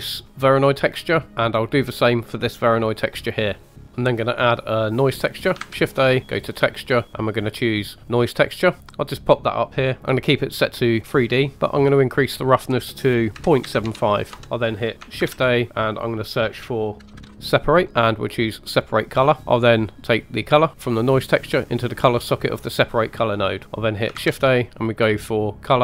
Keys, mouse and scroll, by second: 0.2 middle click, 1.3 middle click, 1.3 scroll down 1, 1.7 drag, 3.7 middle click, 3.7 scroll down 1, 3.9 middle click, 3.9-5.2 scroll up 2, 5.6 shift+a, 9.7-10.4 typing, 9.8-10.8 drag, 11.5-12.2 scroll up 1, 12.2 click, 15.1 shift+a, 19.4 ctrl+z, 20.3-20.6 drag, 23.2 middle click, 23.6 click, 24.1 shift+a.